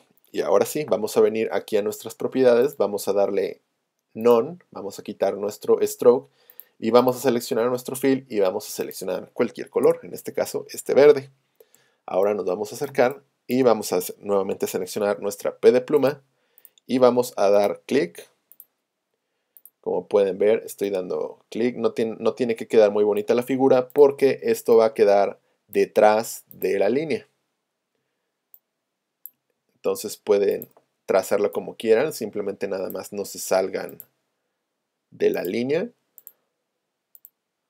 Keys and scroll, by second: 9.9 Return, 11.8 z, 14.5 p.